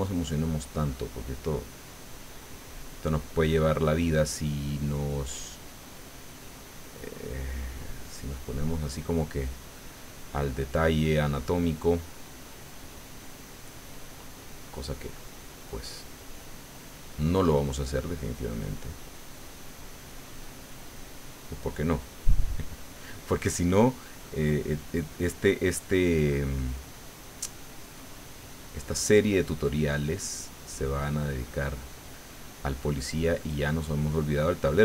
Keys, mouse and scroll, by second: 7.8 middle click, 8.6-13.9 drag, 14.1 middle click, 15.2-18.3 drag, 18.3 middle click, 19.3-20.8 drag, 22.0 middle click, 22.8-24.5 drag, 24.5 middle click, 26.2 click, 27.0 click, 27.6-34.8 drag.